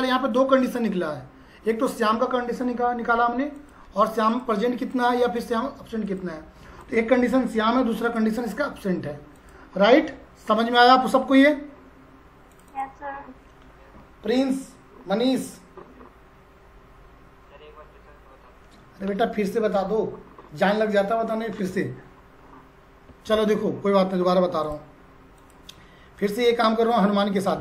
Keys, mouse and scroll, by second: 12.5 click, 24.7 click.